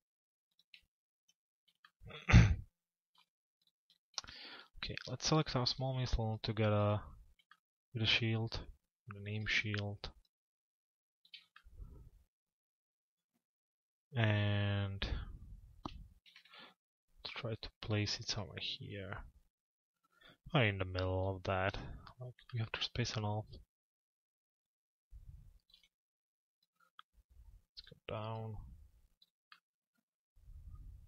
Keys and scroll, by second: 15.8 t, 21.2 p.